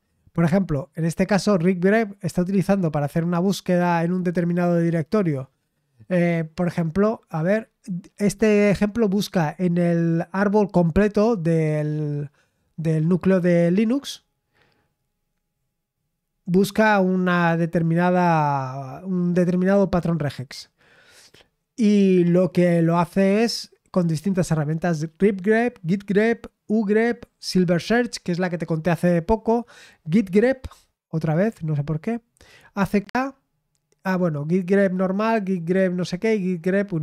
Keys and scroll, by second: 1.2-4.0 scroll down 1, 4.0-5.8 scroll down 1.